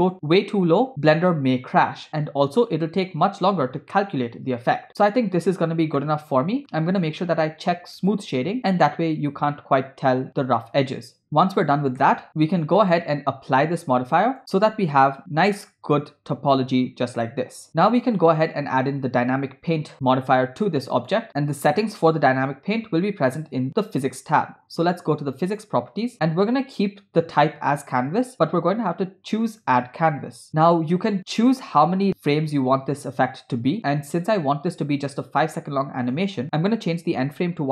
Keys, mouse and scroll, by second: 2.4 scroll down 2, 6.0-6.7 shift+middle drag, 8.4 click, 9.7 scroll up 2, 11.2-11.6 scroll down 6, 12.1 shift+middle click, 12.8-14.4 drag, 14.9 Tab, 15.6-15.9 scroll up 4, 17.4 scroll down 3, 17.7 Tab, 18.1-21.2 drag, 25.5 click, 29.5 click, 30.5 scroll down 6, 34.4 click, 36.0-37.7 drag.